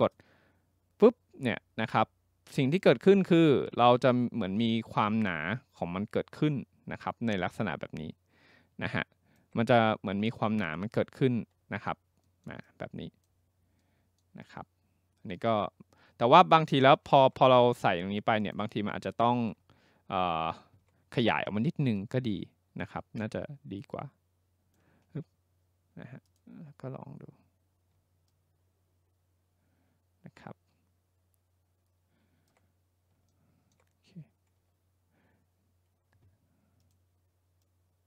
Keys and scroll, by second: 25.1 ctrl+z.